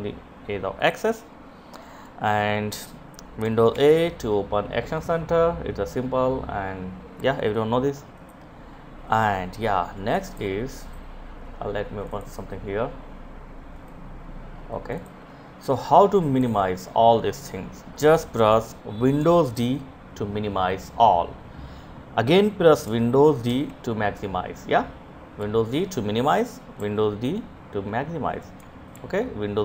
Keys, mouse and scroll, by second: 0.2 click, 3.1 super+a, 7.6 click, 13.2 right click, 14.1 click, 18.9 super+d, 22.9 super+d, 24.8 d, 27.7 click, 28.3 super+d, 29.3 d.